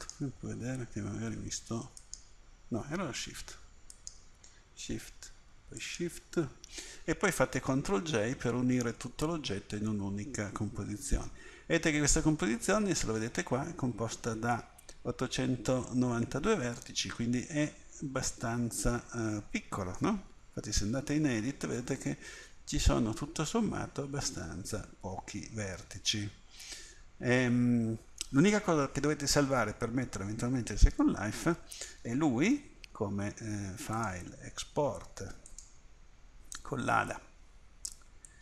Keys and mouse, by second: 0.0-1.3 right drag, 1.3-5.8 middle drag, 8.1 ctrl+j, 12.2 middle drag, 17.1 middle click, 18.3 middle click, 18.4-18.9 middle drag, 21.0 Tab, 26.4 middle click, 26.5 middle click, 32.5 Tab.